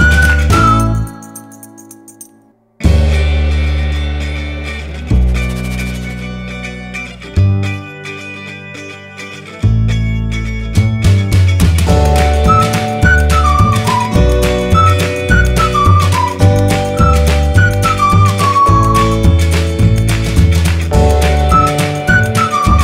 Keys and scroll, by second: 1.4-2.6 typing, 17.6-19.5 typing, 22.2 space.